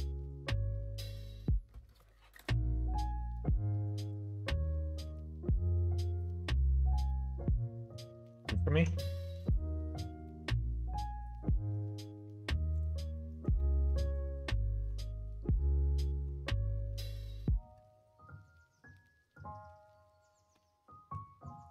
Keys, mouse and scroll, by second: 0.2 click, 0.5 Tab, 0.9 click, 3.2 ctrl+a, 6.2 middle click, 7.4 click, 9.3 click, 12.6 click, 13.5-14.8 middle drag, 15.9 middle click, 16.6 middle click, 20.5 middle click.